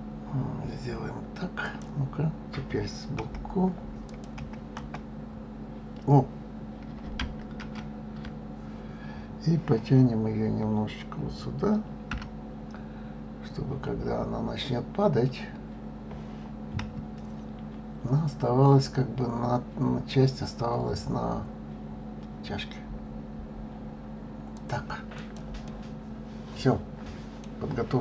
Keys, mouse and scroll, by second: 2.9 KP_1, 3.8 click, 4.1 KP_1, 4.5 KP_3, 5.5 scroll down 3, 7.4 ctrl+z, 11.8 g, 24.9 click, 25.4-27.3 middle drag, 27.3 scroll down 1, 27.5-28.0 scroll up 4.